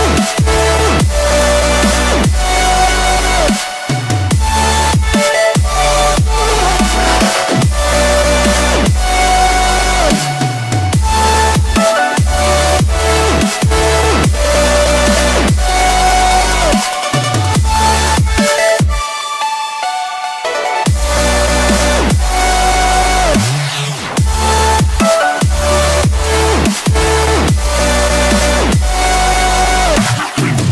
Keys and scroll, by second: 19.3 ctrl+alt+z.